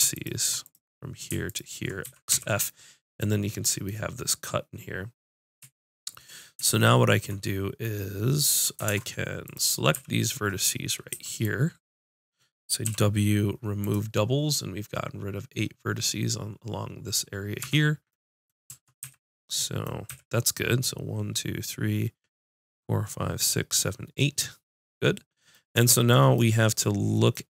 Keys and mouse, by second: 2.0 x, 2.7 click, 8.9 ctrl+Tab, 9.9 z, 11.1 b, 12.7 click, 12.9 w, 17.6 Tab, 18.7 Tab, 19.0 z, 20.1 a, 24.4-25.6 middle drag.